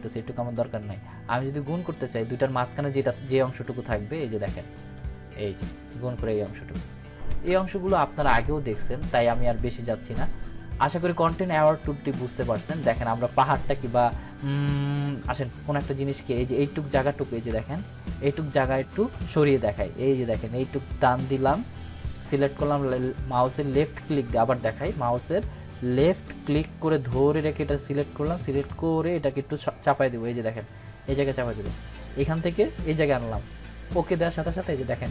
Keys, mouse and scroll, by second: 7.3 ctrl+d, 17.2 ctrl+d, 17.5 ctrl+=, 18.6-19.6 scroll down 2, 19.6-22.4 drag, 24.6 ctrl+d, 25.3-28.5 drag, 34.1 click.